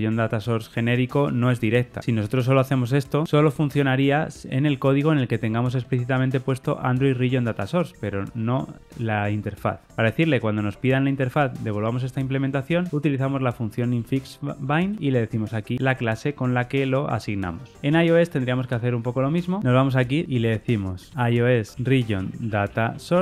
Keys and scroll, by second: 14.8 Return, 15.2 Tab, 20.2 super+n.